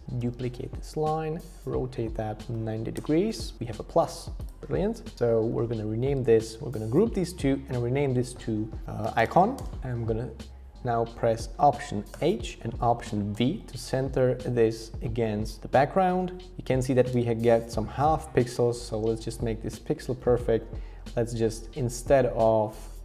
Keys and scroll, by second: 0.2 super+d, 2.2-3.0 typing, 5.1 super+g, 6.1 super+r, 8.8-9.7 typing, 12.1 alt+h, 13.3 alt+v.